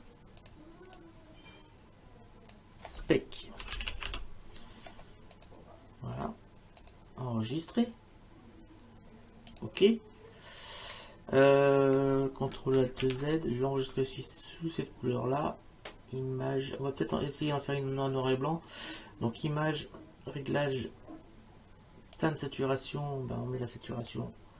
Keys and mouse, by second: 0.4 click, 3.4-4.6 typing, 5.4 click, 6.8 click, 9.5 click, 13.0 ctrl+alt+z, 19.4 click, 22.2 click, 24.1 click.